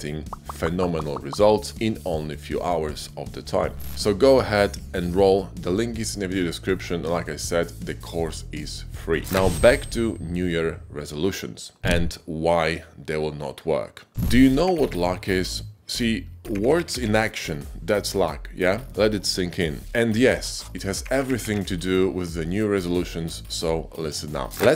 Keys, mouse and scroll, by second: 4.0 g, 4.1 x, 5.2-6.7 drag, 7.0 ctrl+b, 7.6 g, 7.7 y, 7.9 z, 8.4 ctrl+b, 9.0 Tab.